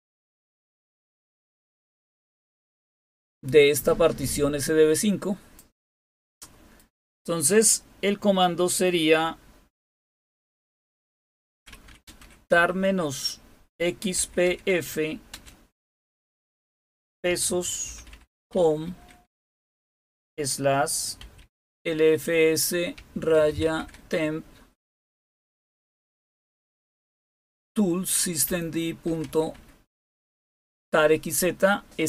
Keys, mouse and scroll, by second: 0.0-1.3 typing, 3.2 typing, 4.9-6.3 drag, 6.7 click, 11.2-15.3 typing, 16.9-26.1 typing, 28.5-29.8 typing.